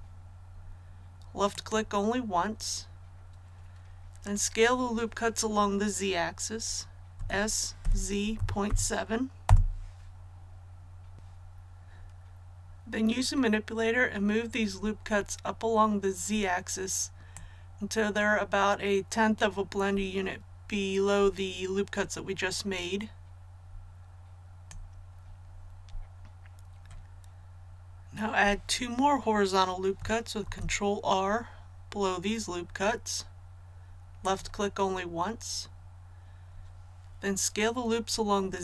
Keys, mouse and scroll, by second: 0.4-1.5 scroll up 1, 1.5 click, 7.1-8.6 typing, 9.4 Return, 11.1-22.1 drag, 22.2-25.2 drag, 30.4 ctrl+r, 32.3-34.2 scroll up 1, 34.2 click.